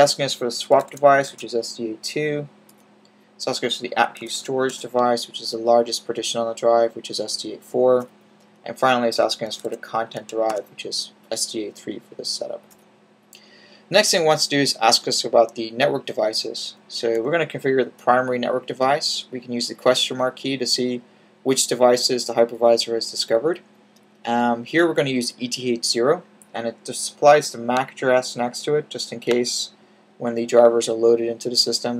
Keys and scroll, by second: 0.5-1.2 typing, 4.0-4.6 typing, 9.3-10.4 typing, 16.8-17.6 typing.